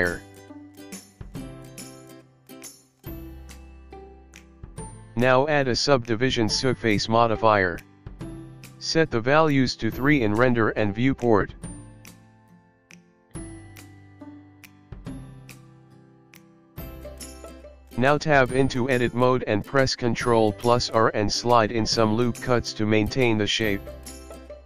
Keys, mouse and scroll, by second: 1.8 Tab, 1.8 click, 3.9 Tab, 4.8 click, 5.6 click, 9.2 middle click, 13.2 click, 13.5 click, 13.6 click, 15.4 Tab, 16.1 KP_1, 16.5-17.2 scroll up 3, 18.6 ctrl+r, 21.9 ctrl+r.